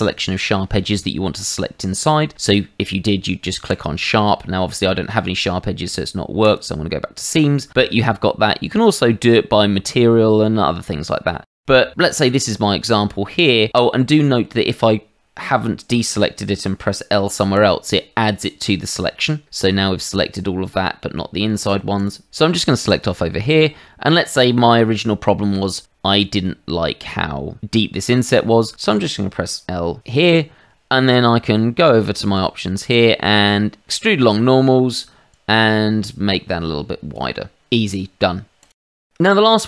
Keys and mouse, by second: 3.6 click, 6.4 click, 11.3 middle click, 11.9 shift+middle click, 12.2 middle click, 13.9 middle click, 17.5 l, 20.4 middle click, 21.4 middle click, 22.8 click, 23.5 middle click, 26.2 shift+middle click, 28.4 shift+middle click, 32.3 click, 35.3 click, 38.6 click, 38.9 middle click.